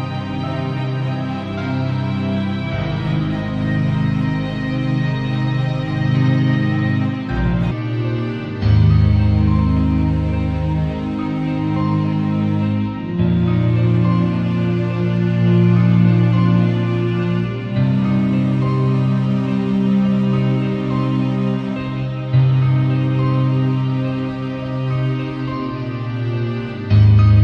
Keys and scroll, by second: 2.0 ], 10.5 v, 16.2 super+l.